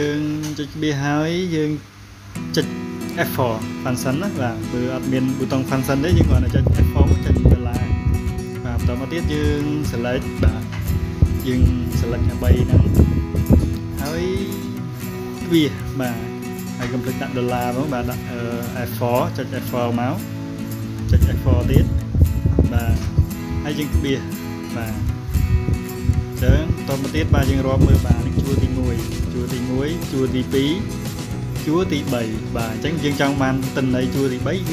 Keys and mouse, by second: 3.6 click, 8.8-11.1 drag, 15.8 click, 19.9 click, 23.1 click.